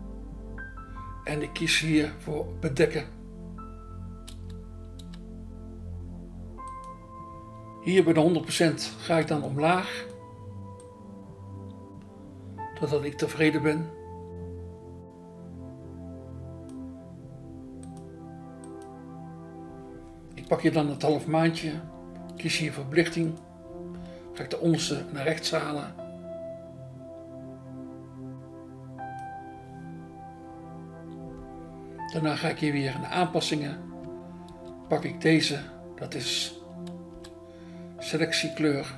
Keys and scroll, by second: 4.4 BackSpace, 5.0 BackSpace, 8.5 BackSpace, 9.1 BackSpace, 21.5 BackSpace, 23.0 BackSpace, 24.8 BackSpace, 33.9 BackSpace, 37.1 BackSpace.